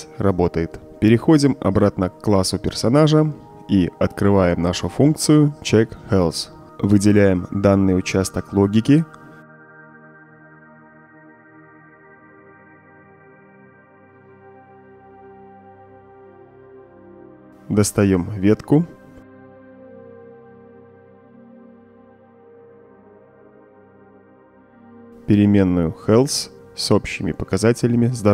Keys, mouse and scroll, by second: 0.3 click, 3.5 click, 3.6 click, 5.0-5.4 right drag, 5.6 middle click, 5.9-6.3 right drag, 6.6-7.6 drag, 8.8-11.2 drag, 11.6-12.0 drag, 11.6-12.0 right drag, 12.6-13.2 drag, 14.0 click, 14.5-15.0 drag, 14.5-15.8 right drag, 17.2-18.9 drag, 19.7 b, 19.8 Return, 21.3-22.1 drag, 23.6 right drag, 23.9 middle click, 24.0 right drag, 24.5 drag, 26.3 middle click, 26.4-27.9 scroll down 3, 26.7 middle click, 27.0 middle click, 27.3 middle click.